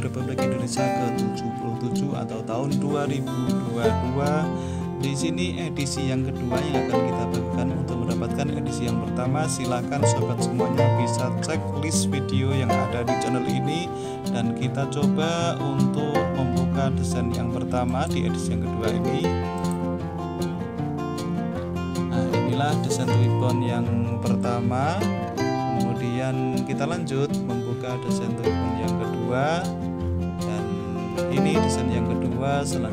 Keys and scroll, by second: 7.2 r, 20.7 4.